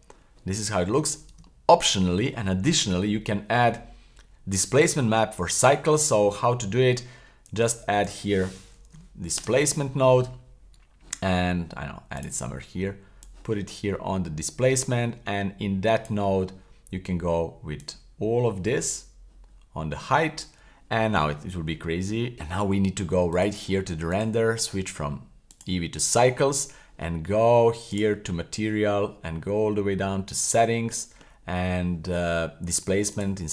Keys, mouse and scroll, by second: 1.5 shift+middle click, 6.5 shift+middle click, 7.5 shift+a, 12.2-16.2 drag, 17.8 click, 18.0-20.6 drag, 22.1 scroll up 3, 22.3 click, 23.3 click, 24.1-25.6 drag, 27.9 click, 28.3-30.4 scroll down 22, 30.4 click, 30.8-32.6 scroll down 6, 33.1-33.5 drag.